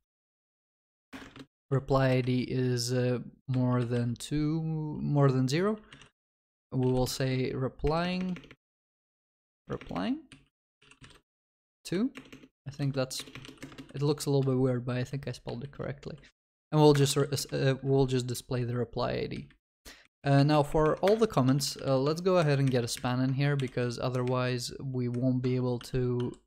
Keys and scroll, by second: 1.1 Return, 17.0 Return, 22.0 Tab.